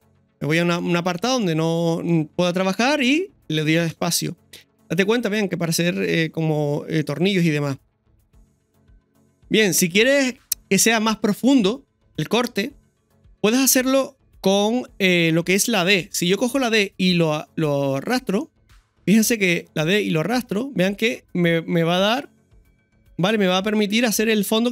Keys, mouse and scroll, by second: 1.0-1.3 scroll down 2, 2.3 scroll up 1, 6.5-7.0 scroll down 2, 10.2-10.6 scroll up 2, 12.1 scroll down 1, 13.4 KP_1.